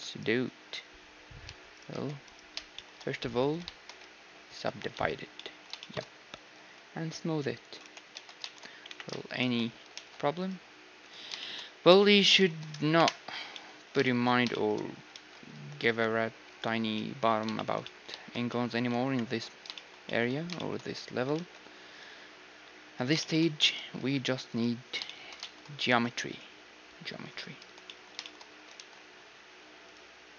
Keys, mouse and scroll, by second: 0.1-4.2 right drag, 1.4 h, 1.9 h, 2.7 middle click, 3.4 z, 4.2-7.8 middle drag, 4.4 ctrl+3, 4.9 z, 6.4 t, 7.6-9.4 drag, 7.8 t, 8.1 Tab, 8.4-16.3 middle drag, 8.8 KP_1, 9.9 ctrl+r, 12.9 KP_Decimal, 15.1 ctrl+r, 16.9-30.3 middle drag, 19.0 KP_1, 21.3 ctrl+r, 23.7 ctrl+r, 24.6-26.7 right drag, 25.9 ctrl+r, 29.6 ctrl+r.